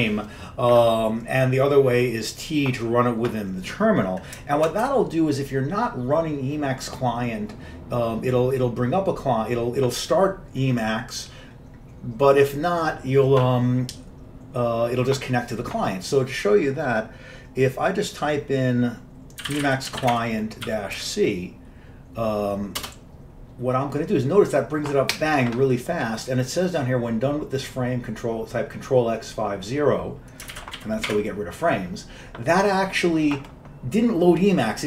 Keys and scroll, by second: 4.9 q, 19.3-21.3 typing, 22.8-24.0 typing, 30.6 ctrl+x, 30.9 5, 31.2 0.